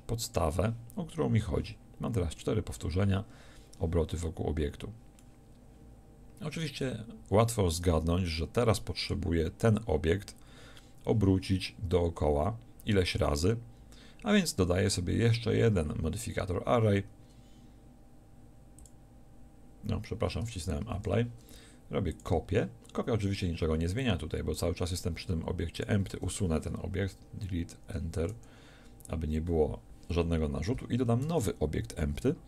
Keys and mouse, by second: 2.7-5.3 middle drag, 7.0-18.8 middle drag, 20.2 click, 20.8 ctrl+z, 22.1-24.1 drag, 25.8-30.8 drag, 31.3 shift+a.